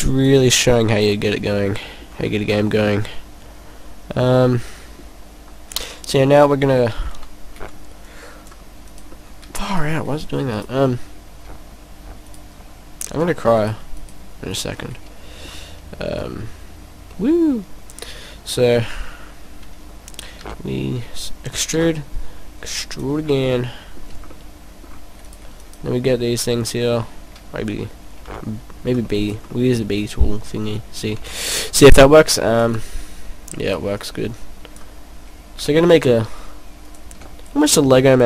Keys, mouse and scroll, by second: 0.0 click, 0.1 click, 0.8 scroll down 2, 0.9 middle click, 2.4-2.7 scroll up 4, 2.9 middle click, 5.6 right click, 6.1 middle click, 7.0 scroll down 1, 7.5 c, 8.9 right click, 9.2 middle click, 9.6 right click, 12.2 shift+right click, 13.6 shift+right click, 14.0 shift+right click, 14.6 shift+right click, 14.9 middle click, 16.2 click, 20.5 e, 21.7 click, 21.8 e, 23.0 click, 23.3 scroll down 2, 23.6 middle click, 24.4 middle click, 24.4 scroll down 1, 25.4 right click, 25.6 right click, 28.3 b, 29.1 middle click, 29.5 middle click, 31.1 b, 32.6 click, 33.2 click, 33.9 click, 35.6 e, 37.0 click.